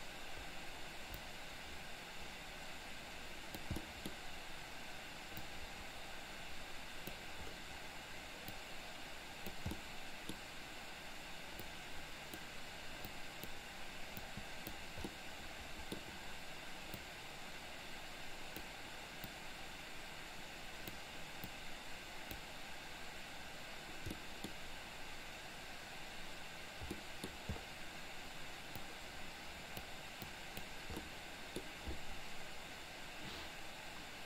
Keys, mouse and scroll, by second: 1.3-3.7 drag, 3.8 middle click, 5.4-7.2 drag, 8.7 click, 9.8 middle click, 11.7 click, 13.2 click, 14.3 click, 15.2 middle click, 17.0-18.7 drag, 19.3-21.0 drag, 21.5 click, 24.0 middle click, 27.0 middle click, 28.9-30.0 drag, 30.3 click, 31.0 middle click.